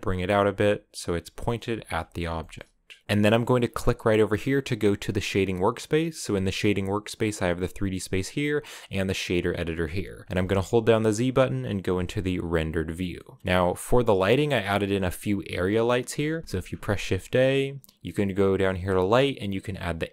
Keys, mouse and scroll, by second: 0.1 g, 1.2 shift+middle click, 1.8 a, 2.1 shift+middle click, 3.0 z, 3.4-6.1 drag, 6.1-11.8 shift+middle drag, 11.8 z, 12.4 click, 12.9 middle click, 13.2-14.5 scroll down 7, 13.8 middle click, 14.5 right click, 15.0-20.1 right drag.